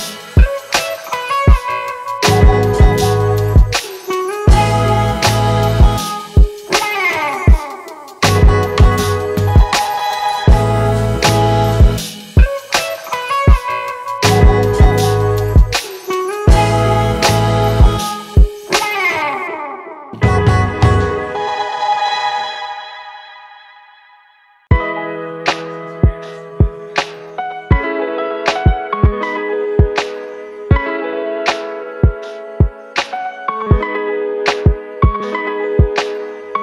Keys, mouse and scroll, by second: 18.7-22.3 typing, 23.7 typing, 26.0 typing, 34.5 typing.